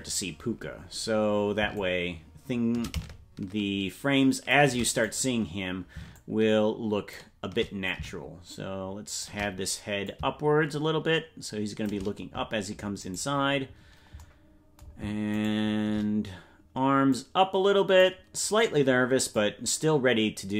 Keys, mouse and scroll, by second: 1.7-4.7 shift+drag, 5.1 right click, 6.1-7.3 shift+drag, 7.9-9.3 drag, 10.0-12.0 drag, 13.1 right click, 15.5 shift+right click, 17.1-18.2 drag, 19.3-20.5 drag.